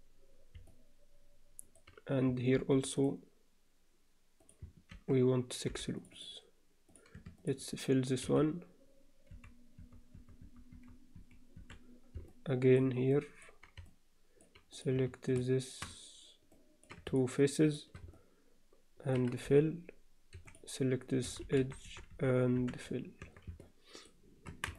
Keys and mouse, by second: 0.7-1.8 middle drag, 2.6 ctrl+r, 4.9 ctrl+r, 8.2 f, 9.3-11.6 typing, 12.3 middle click, 13.1 middle click, 13.9 alt+middle click, 14.7 click, 16.5 middle click, 17.6 shift+click, 18.2 alt+middle click, 19.4-22.6 typing, 20.4 click, 23.2 Tab, 23.6 alt+middle click, 24.5 Tab.